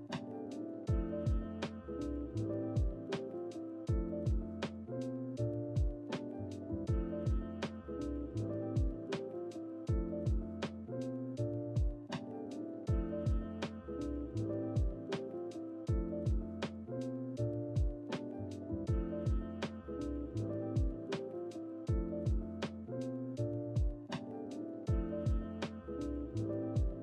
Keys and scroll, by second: 0.8 g, 0.9 x, 1.7 g, 1.7 x, 2.8 g, 2.9 z, 8.0 Delete, 8.3 Delete, 8.7 ctrl+z, 14.7 Delete, 14.9 typing, 15.3 Escape, 15.5 ctrl+z, 16.7 Delete, 16.9 g, 17.9 ctrl+z, 18.1-18.8 typing, 22.6 g, 23.9 Delete, 23.9 BackSpace, 26.4 typing, 26.8 Escape.